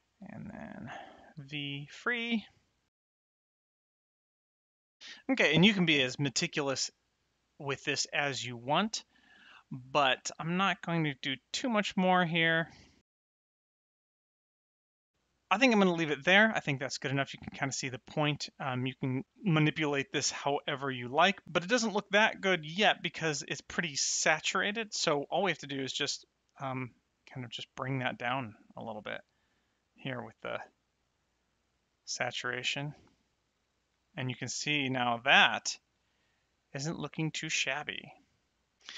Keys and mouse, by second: 0.8 v, 1.1 click, 2.6 click, 3.1 click, 6.6 middle click, 8.1 middle click, 10.4 click, 12.7 click, 13.0 middle click, 13.2 click, 13.4 middle click, 13.6 click, 14.2 middle click, 14.4 click, 15.0 middle click, 25.8 click, 29.8 click, 34.7 middle click, 37.4 middle click, 38.8 click.